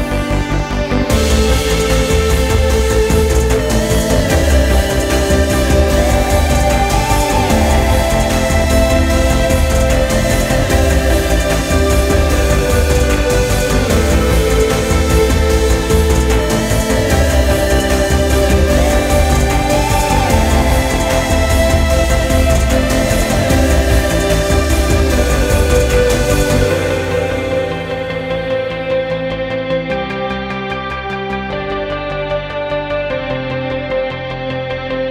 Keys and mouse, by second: 7.7-12.3 drag, 16.1-20.4 middle drag, 20.4 click, 31.0-35.1 drag.